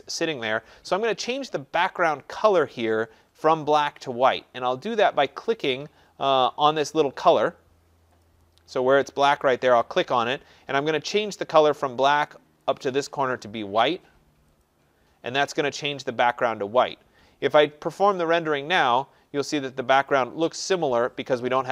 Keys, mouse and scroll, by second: 6.5 click, 8.2 click, 10.0 click, 12.6 click, 14.6 click, 18.1 click.